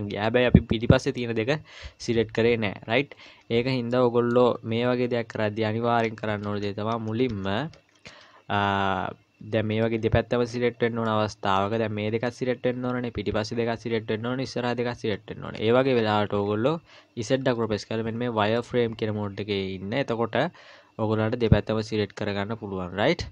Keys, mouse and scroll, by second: 0.7 middle click, 2.9-3.7 scroll down 4, 3.9 middle click, 4.9 KP_1, 5.6-6.3 scroll up 1, 6.3 scroll up 2, 6.4 ctrl+z, 6.9 ctrl+z, 7.9-8.7 scroll up 2, 8.7 scroll up 1, 11.1 middle click, 12.3-14.4 scroll down 10, 15.5 KP_1, 16.0-16.3 scroll up 4, 16.9 scroll up 4, 17.4 z, 19.6 scroll up 1.